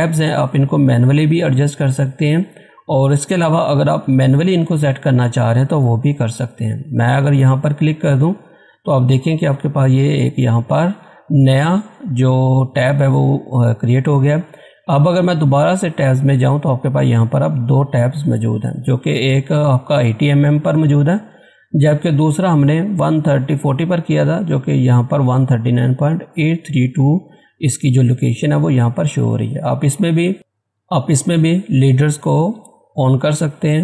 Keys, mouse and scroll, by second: 4.2-5.3 scroll down 1, 5.3 scroll up 1, 7.5 click, 15.2 click, 15.3 click.